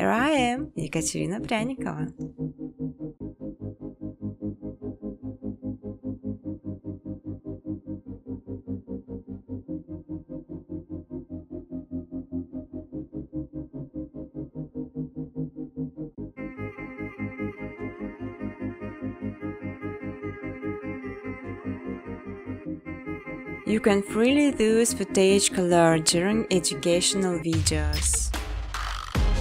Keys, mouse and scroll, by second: 0.5 click, 0.8 right click, 1.9 click, 2.6-5.6 typing, 6.1 click, 7.6 click, 9.0 click, 9.7 click, 10.9 click, 11.1 click, 11.7 click, 11.9 click, 12.5 click, 12.8 click, 13.3 click, 14.7 ctrl+c, 14.9 ctrl+d, 15.3 click, 16.0-17.4 typing, 17.4 ctrl+c, 17.6 ctrl+d, 18.2 click, 18.5 click, 19.1-20.1 typing, 20.3 ctrl+c, 20.6 ctrl+d, 21.3 click, 21.7-27.6 typing, 24.5 click, 25.4 click, 27.1 middle click, 27.7 click.